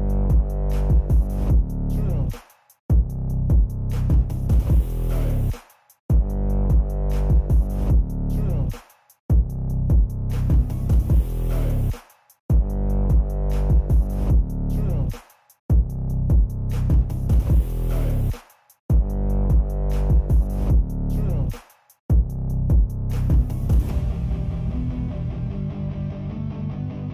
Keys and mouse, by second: 1.2 click, 1.9 g, 2.7 click, 2.8-3.4 drag, 4.1 n, 4.6-5.0 ctrl+middle drag, 5.2-5.7 alt+middle drag, 7.5 click, 7.6 middle click, 7.7 click, 8.4 ctrl+click, 9.6 click, 10.3 n, 10.6 click, 10.9 ctrl+Tab, 11.1 click, 11.3 r, 12.2 r, 12.6 r, 14.4 click, 17.9 click, 18.1 g, 18.7 shift+d, 19.5 KP_Decimal, 20.2-20.5 ctrl+middle drag, 20.7 alt+middle drag, 21.1 Tab, 22.2 s, 23.2 alt+click, 23.8 click, 25.7-27.1 drag.